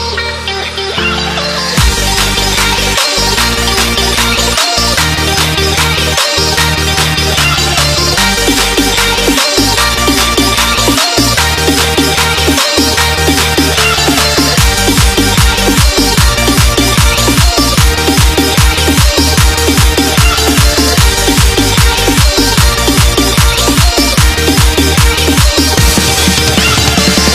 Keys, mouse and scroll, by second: 6.8 super+Num_Lock, 7.3 click, 8.1 scroll up 1, 8.4 click, 10.8 Delete, 11.9 click, 16.8 click.